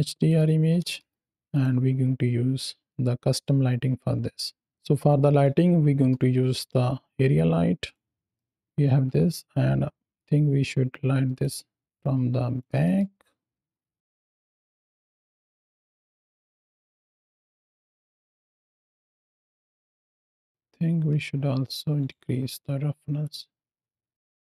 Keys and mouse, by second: 0.1 click, 4.7 KP_7, 4.7 shift+a, 5.8 shift+a, 8.2 drag, 8.9 KP_3, 10.0 r, 11.2 click, 12.7 shift+middle click, 13.4 s, 14.4 click, 15.5-16.8 drag, 17.5 r, 17.7 click, 18.0 g, 18.6 click, 19.1 r, 19.8 shift+click, 19.8 shift+middle click, 19.9 shift+click, 20.8 z, 21.9-23.1 right drag, 23.1-24.5 drag.